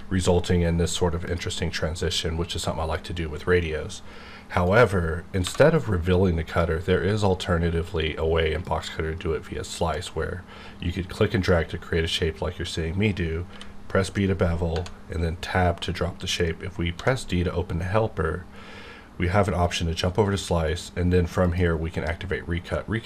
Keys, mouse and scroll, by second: 1.2 click, 4.5 right click, 5.4 1, 6.5 click, 8.9-13.5 drag, 13.5 b, 14.7 Tab, 16.9 d, 19.6 click, 20.9 click.